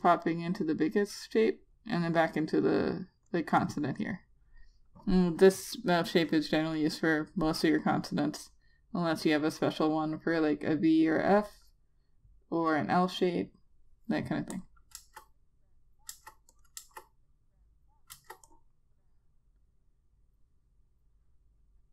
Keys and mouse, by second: 15.2 click, 15.6 Return, 16.8 Return, 17.2 click, 17.4 Return, 18.8 Return, 19.1 click.